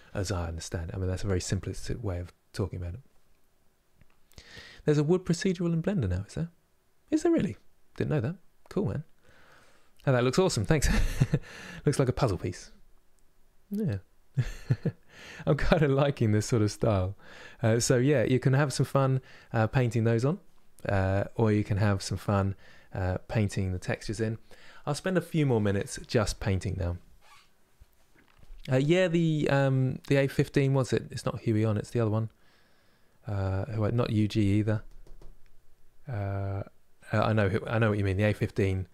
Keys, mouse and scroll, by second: 16.1-38.9 middle drag.